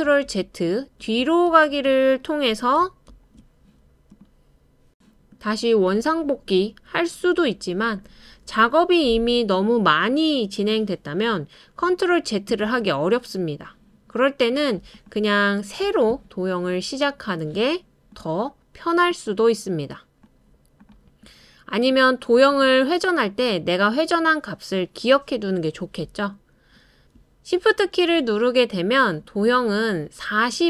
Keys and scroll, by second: 0.7 super+z, 1.7 super+z, 3.1 super+z, 3.8 super+z, 4.6 super+z, 15.8 BackSpace.